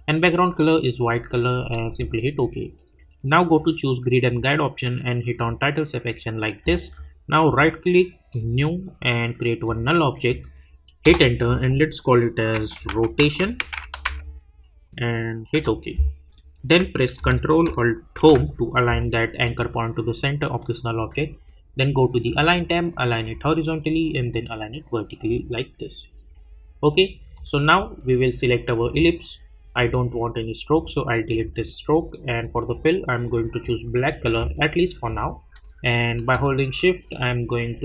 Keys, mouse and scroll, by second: 1.8 click, 4.2 click, 7.4 right click, 8.4 click, 11.0 Return, 15.5 Return, 22.2 click.